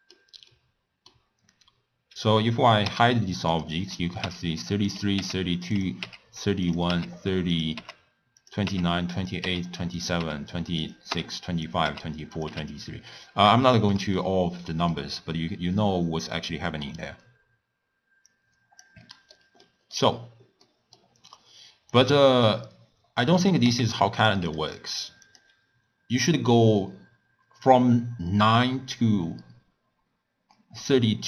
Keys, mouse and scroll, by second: 2.8 h, 3.5 click, 4.2-12.5 typing, 4.9 click, 5.7 click, 6.6 click, 7.5 click, 8.4 click, 9.1 click, 10.0 click, 10.8 click, 11.6 click, 12.3 click, 13.6-15.2 shift+middle drag, 15.2-16.0 scroll down 1, 16.0-18.2 middle drag, 18.2 click, 19.0-21.9 middle drag, 21.9 click, 23.2 click, 23.6 g, 24.4 click, 25.2 click.